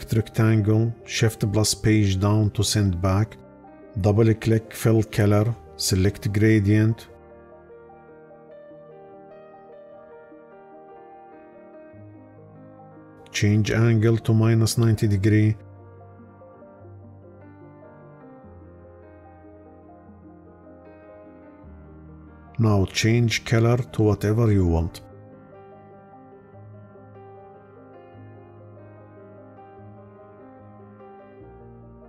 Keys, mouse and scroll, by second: 1.0 shift+Page_Down.